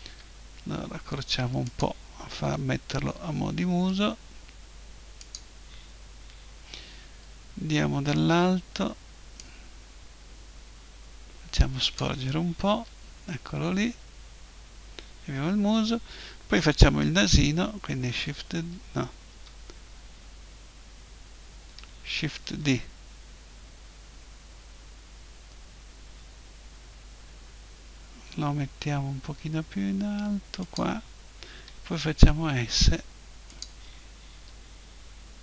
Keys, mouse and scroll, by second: 0.1 s, 1.8 click, 2.4 g, 5.3-7.0 drag, 7.0 KP_7, 10.2-11.4 drag, 12.6 KP_1, 14.3-16.7 middle drag, 17.9 shift+s, 22.2 shift+d, 30.8-32.7 drag, 31.6 s, 33.6-35.4 drag, 34.3 KP_7.